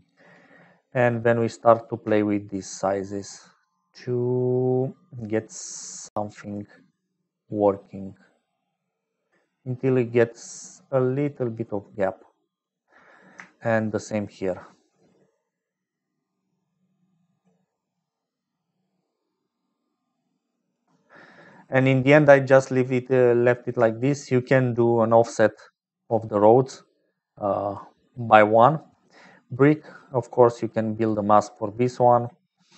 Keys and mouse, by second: 0.0-29.1 typing, 2.5-12.6 shift+drag, 14.6-20.7 shift+drag, 24.1 shift+click, 26.3-27.8 drag, 28.3 click, 30.1 click, 31.7 middle click.